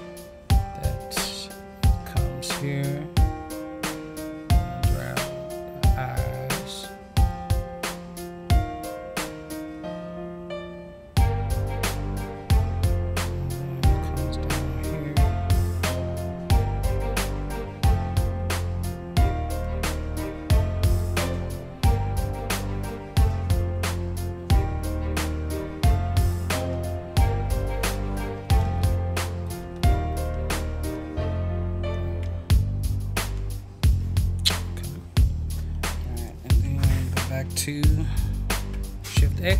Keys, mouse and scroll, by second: 38.7 shift+x.